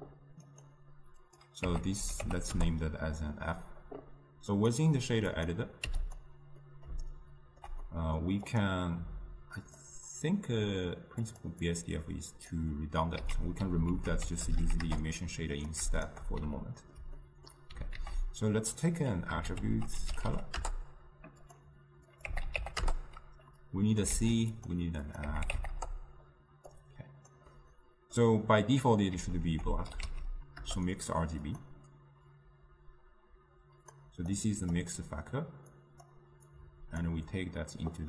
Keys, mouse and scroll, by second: 2.9-13.3 drag, 13.3 x, 14.9 ctrl+a, 16.0 ctrl+shift+click, 20.7 t, 22.9-24.2 drag, 24.2 shift+d, 25.8-30.7 drag, 30.7 ctrl+a, 32.4-34.0 drag, 35.8-38.0 drag.